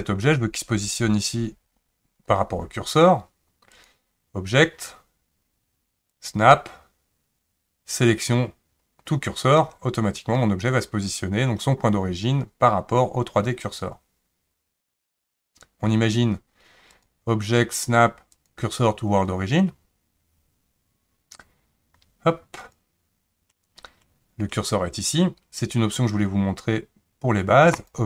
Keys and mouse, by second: 3.8-9.6 drag, 16.9-22.8 drag, 27.8-28.0 drag.